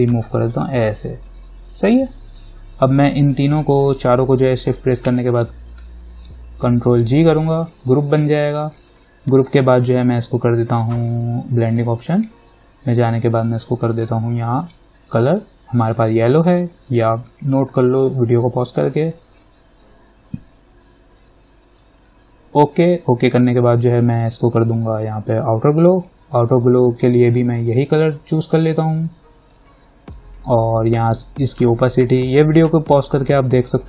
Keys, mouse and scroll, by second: 5.2 shift+click, 7.2 ctrl+g, 8.0 click, 8.9 right click, 11.9 click, 14.8 click, 19.3 click, 22.2 click, 25.5 click, 32.4 click.